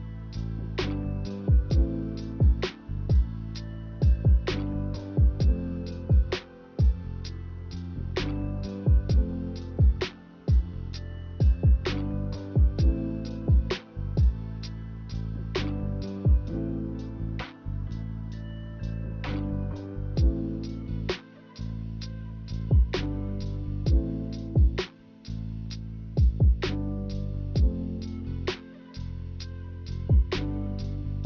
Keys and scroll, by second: 24.9-26.3 typing, 28.2-30.5 typing.